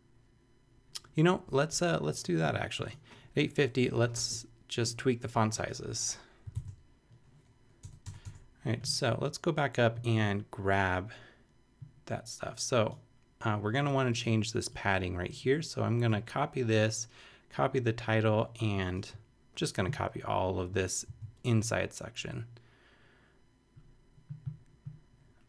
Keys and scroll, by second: 6.5 shift+super+Left, 7.8 BackSpace, 8.0 Tab, 21.0 super+c.